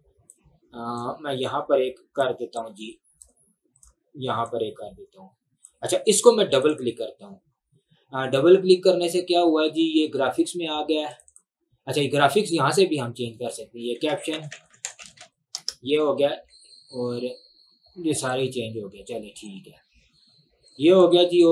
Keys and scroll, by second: 14.3-15.8 typing.